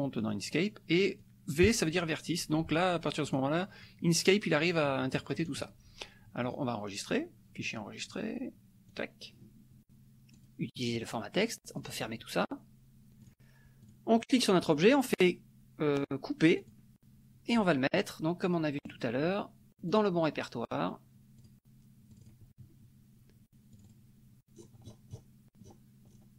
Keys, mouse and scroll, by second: 0.2 click, 1.2 click, 3.3 click, 3.8-5.7 drag, 6.4 click, 8.9 click, 10.3 click, 11.7 click, 13.2 click, 13.8 click, 14.7 right click, 16.7 click, 18.8 click, 19.9 click, 21.4-22.7 drag, 23.7 click, 24.5-26.3 scroll down 8.